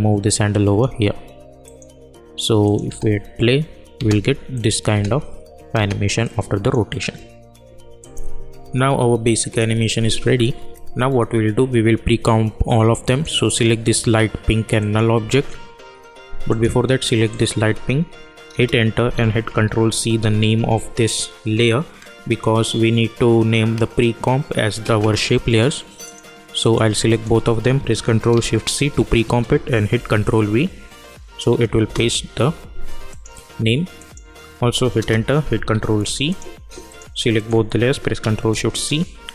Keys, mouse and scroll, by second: 2.8 space, 4.5 click, 4.9 space, 6.2 click, 6.9 scroll up 1, 8.0 click, 8.6 u, 9.1 u, 13.0 click, 14.9 shift+click, 16.4 click, 18.5 Return, 19.4 ctrl+c, 26.0 click, 27.1 shift+click, 28.7 ctrl+shift+c, 29.9 ctrl+v, 31.8 Return, 33.1 click, 34.9 Return, 35.7 ctrl+c, 36.2 click, 37.3 shift+click, 38.4 ctrl+shift+c.